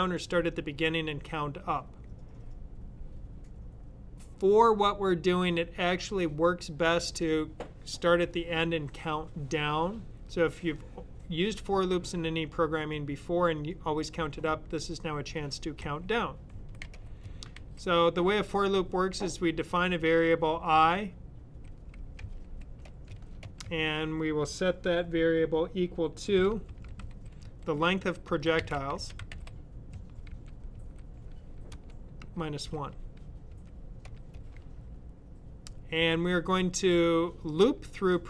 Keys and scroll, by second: 15.8-17.5 typing, 21.3-23.0 typing, 26.4-30.7 typing, 32.4-33.4 typing.